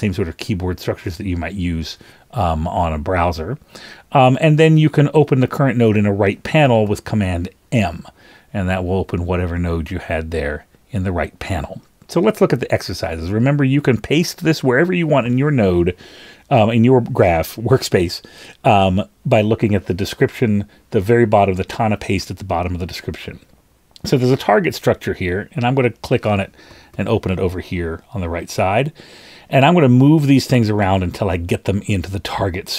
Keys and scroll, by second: 1.1 super+[, 6.8 super+m, 26.9 super+m.